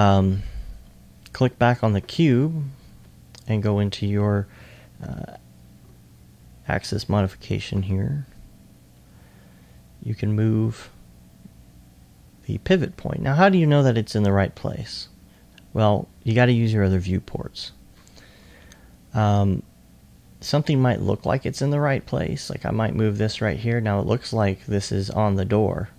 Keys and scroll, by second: 5.0 e, 5.2 e.